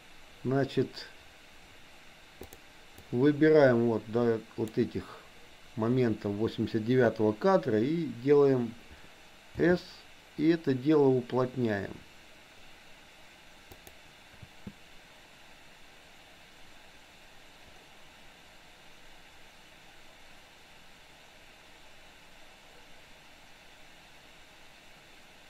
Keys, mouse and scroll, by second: 3.0-4.7 drag, 9.5 s, 14.5 space.